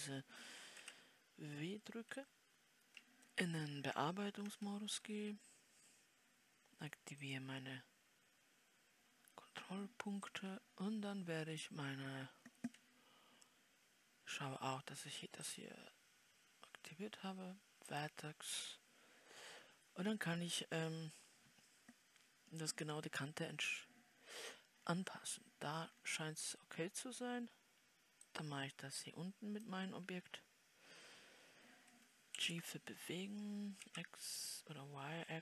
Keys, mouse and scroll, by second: 23.0-25.3 scroll up 3, 25.3-26.5 scroll down 4, 26.5-28.8 scroll down 1, 28.8-35.4 drag.